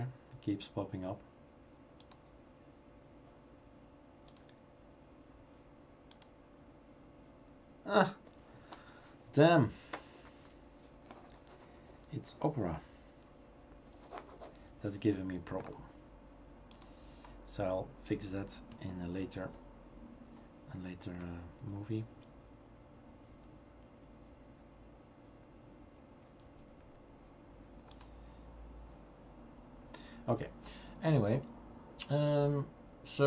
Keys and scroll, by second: 19.4 super+t, 21.6 super+t, 23.3 super+e, 24.3 super+z, 26.4 super+a, 26.8 super+s.